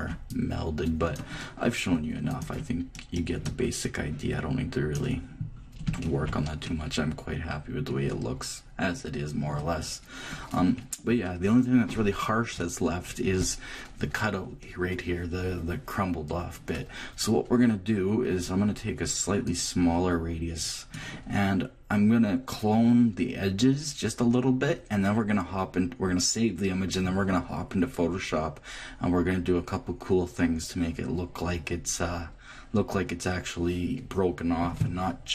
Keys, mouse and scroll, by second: 5.4-8.1 middle drag, 8.1 click, 10.6 click, 11.4 click, 19.4-21.2 drag.